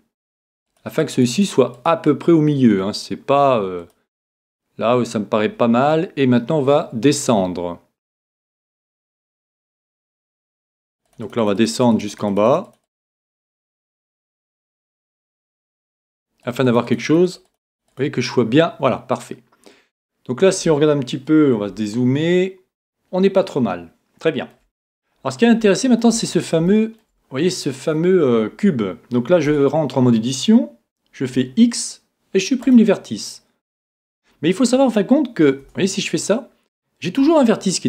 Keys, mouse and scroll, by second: 0.4-3.5 drag, 3.8 click, 21.1-23.8 middle drag, 25.1-25.7 scroll up 1, 25.7-28.7 middle drag, 31.3 x, 33.7-35.6 scroll up 1, 35.6-37.2 middle drag, 35.7 Tab, 37.2 g.